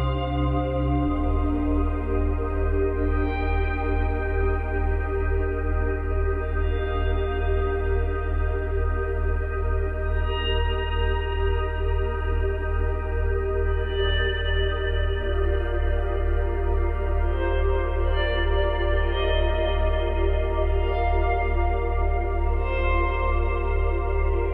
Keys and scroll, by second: 12.4 space, 15.4 space, 15.6 ctrl+z, 20.8 space, 24.3 space.